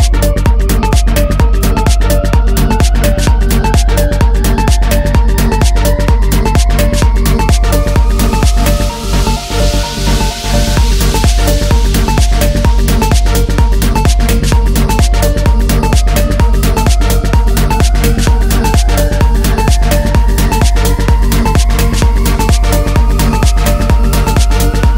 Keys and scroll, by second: 4.2 ctrl+-, 8.6 Delete, 9.5 Delete, 11.9 ctrl+-, 15.6 ctrl+-.